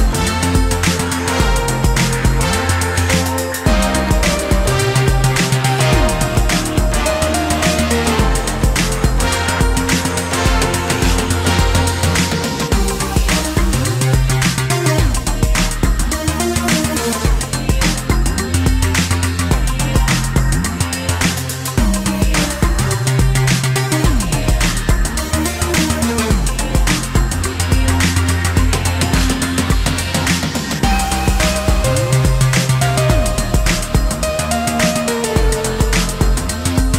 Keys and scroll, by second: 12.5 Delete.